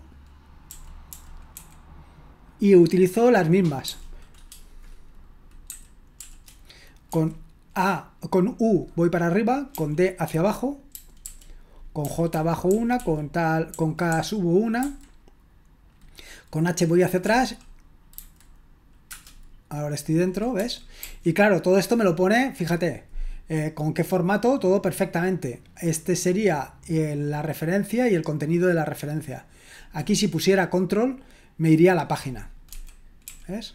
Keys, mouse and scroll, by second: 0.4-2.0 typing, 3.8 u, 5.5-7.1 typing, 9.7-14.8 typing, 17.2-19.1 typing, 20.6-21.0 typing, 32.7-33.7 typing.